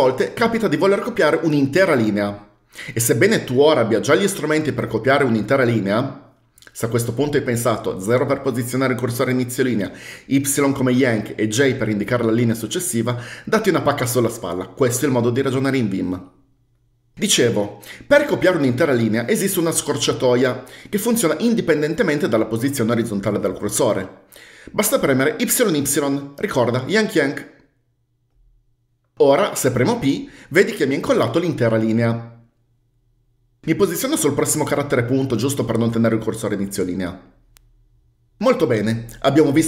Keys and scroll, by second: 25.8 typing, 30.4 typing, 34.5-35.3 typing.